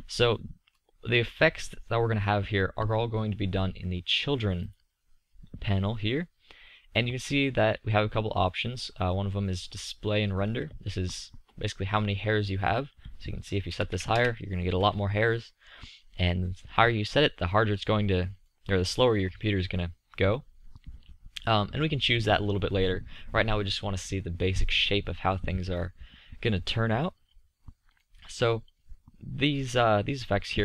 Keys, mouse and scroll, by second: 3.2-4.8 middle drag, 6.7-7.1 middle drag, 12.2 middle click, 14.6-15.5 middle drag, 15.7-17.4 middle drag, 26.2-27.9 middle drag.